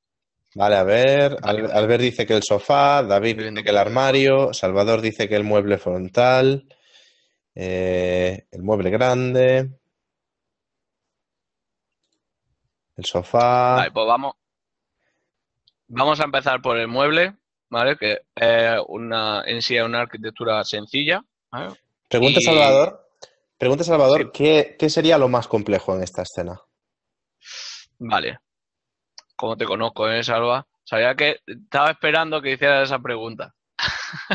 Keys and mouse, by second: 33.0 click, 33.4 ctrl+KP_Add.